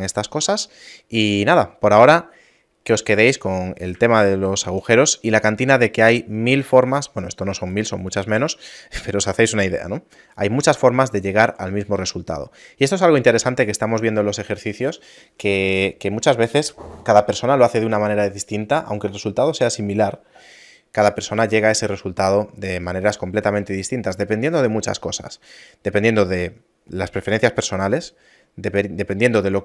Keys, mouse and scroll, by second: 0.7 middle click, 2.1-2.7 scroll up 2, 2.5 middle click, 4.3 shift+middle click, 5.0 middle click, 7.7 right click, 8.5 right click, 8.7 a.